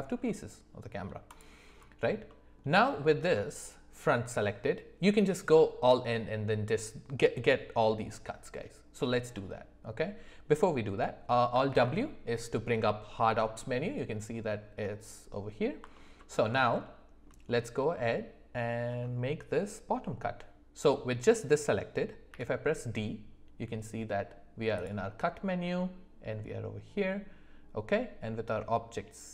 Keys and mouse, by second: 0.2-1.0 middle drag, 2.3 middle click, 9.3-10.0 middle drag, 11.7 alt+w, 16.8 shift+middle click, 22.3 d.